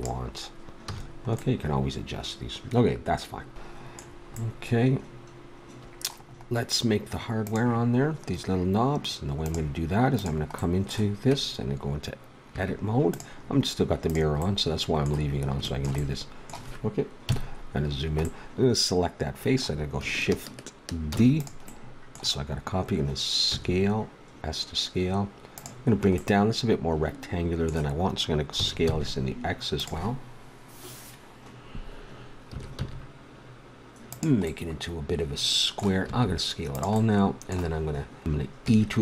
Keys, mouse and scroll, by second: 0.8 a, 1.2 middle click, 3.3 ctrl+s, 7.4 middle click, 10.2-11.9 drag, 12.5 Tab, 14.1 click, 14.7-15.9 middle drag, 17.2 KP_Decimal, 21.1 shift+d, 23.5 s, 26.2 middle click, 28.5 s, 32.5 s, 34.4-36.0 middle drag, 36.1 s, 38.6 e.